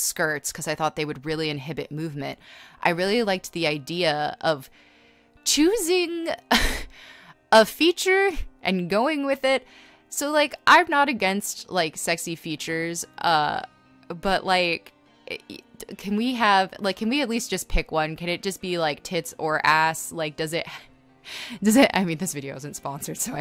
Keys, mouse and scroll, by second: 0.4-6.5 typing, 3.7 scroll, 7.1 ctrl+z, 8.6 ctrl+z, 9.2-13.2 typing, 9.8 scroll, 18.1-20.7 typing, 21.4 scroll, 23.0 space, 23.3 scroll.